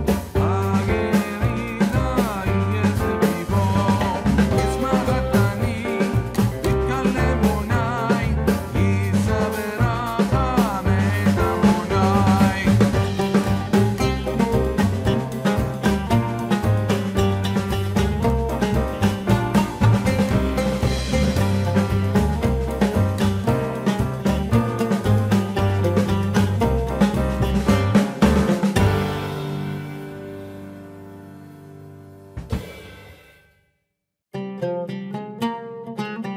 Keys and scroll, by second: 22.5 ctrl+shift+n, 24.5 Return.